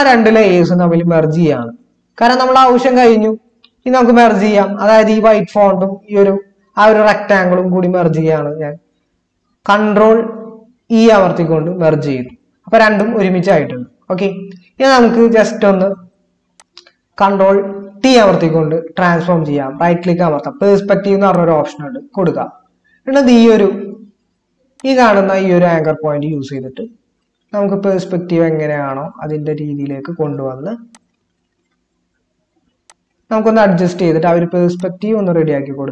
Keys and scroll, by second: 10.9 ctrl+e, 17.9 ctrl+t.